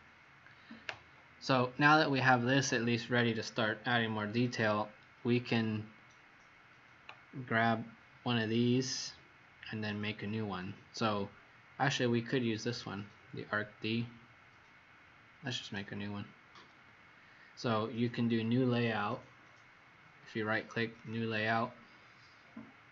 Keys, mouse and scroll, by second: 12.6 click, 15.5 right click, 20.9 click.